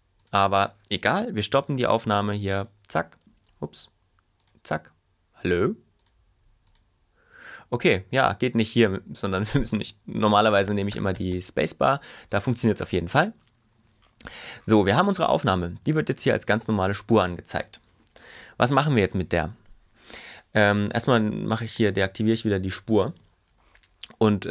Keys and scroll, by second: 10.6 space.